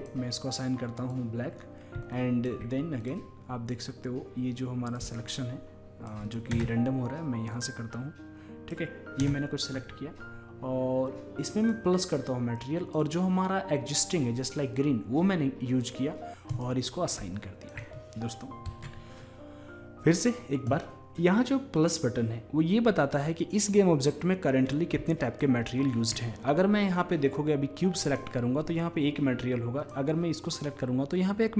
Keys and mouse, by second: 0.0-1.9 drag, 2.2-4.1 drag, 5.0-6.4 drag, 6.5-9.2 drag, 6.5 space, 9.2 space, 11.6 click, 12.7-14.6 drag, 16.5-19.1 drag, 18.7 Tab, 25.2-27.1 drag, 25.7-27.1 middle drag, 28.0-29.8 drag, 29.8-31.5 drag.